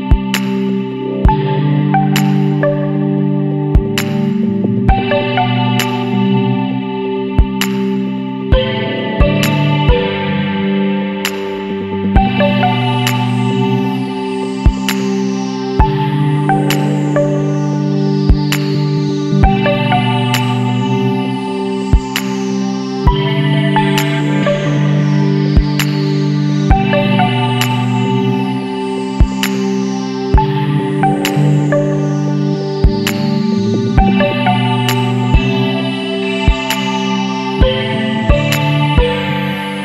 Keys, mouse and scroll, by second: 0.1 g, 2.0 middle click, 2.3 Tab, 2.6-3.3 middle drag, 3.3 Tab, 3.7 Tab, 4.2 alt+a, 4.6-5.9 shift+middle drag, 5.9 click, 6.3 scroll down 1, 6.4-8.6 middle drag, 8.6 alt+a, 9.9-11.4 middle drag, 11.4 click, 11.8 Tab, 12.1-12.6 middle drag, 12.6 a, 13.5 KP_Decimal, 14.3-17.7 middle drag, 17.7 click, 18.2-20.1 middle drag, 20.1 shift+d, 23.5 n, 24.0 n, 25.6 click, 26.1 click, 27.5 click, 28.9-32.0 middle drag.